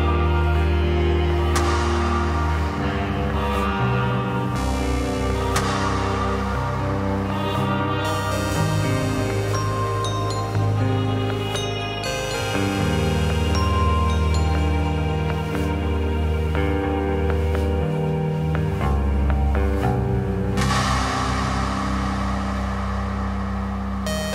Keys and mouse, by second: 1.8 shift+middle click, 2.2 middle click, 3.0 click, 6.1-6.9 drag, 8.6-10.0 drag, 10.5 click, 11.0 click, 14.3-14.7 drag, 18.1 click, 18.5-19.0 middle drag, 19.4 middle click, 20.2 middle click, 21.2 click, 22.8 click.